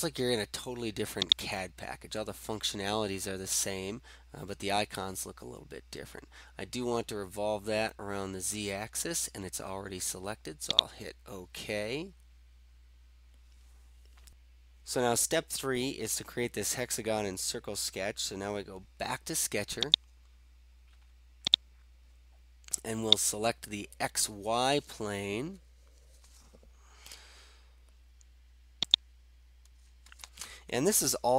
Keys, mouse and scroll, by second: 1.2 click, 10.9-11.8 drag, 11.9-12.6 scroll down 3, 12.6-13.0 scroll down 1, 13.0 scroll up 1, 13.1 scroll, 20.0 click, 21.5 click, 23.2 click, 29.0 click.